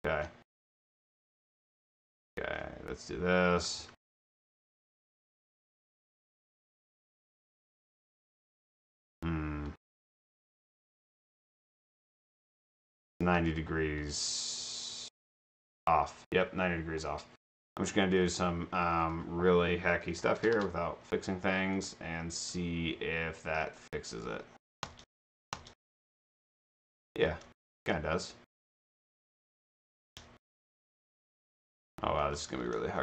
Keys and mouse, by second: 2.3 a, 2.6 d, 3.7 a, 4.7 space, 5.5 a, 7.2 d, 8.4 space, 9.7 space, 10.8 space, 11.8 space, 12.5 space, 13.2 space, 17.1 click, 18.2 click, 19.0 click, 20.5 Return, 21.8 click, 24.9 space, 26.3 space, 27.3 space, 27.8 space, 29.4-33.0 typing.